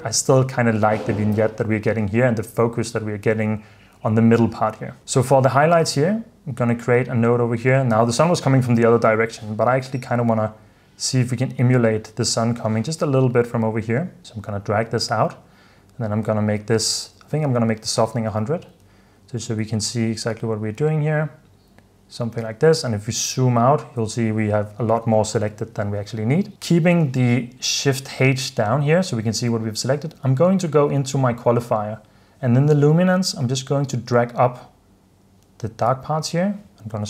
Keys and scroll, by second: 16.9-18.7 typing, 20.3 typing, 25.6 h.